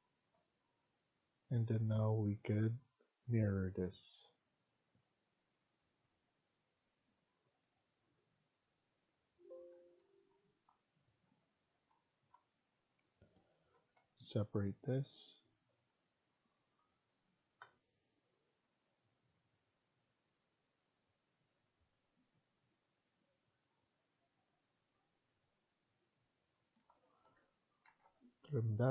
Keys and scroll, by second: 9.6 Escape, 9.9 Escape, 11.0 Tab, 11.6 Tab, 12.1 Tab, 13.6 Left, 13.9 Left, 14.3 Left, 15.3 Left, 15.5 Left, 15.8 Left, 17.5 Delete, 26.7 Escape, 26.9 Escape, 27.1 Escape, 27.6-28.4 typing.